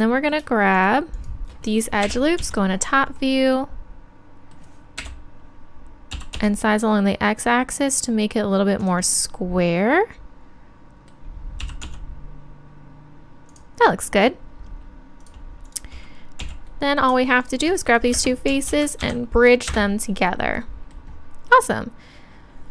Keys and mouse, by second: 2.0 KP_7, 2.4 z, 5.0 KP_7, 6.1 s, 8.9-10.7 drag, 10.7 middle click, 13.6-18.1 drag, 16.8 right click, 17.1-19.7 middle drag, 18.1 space, 22.4-22.7 middle drag.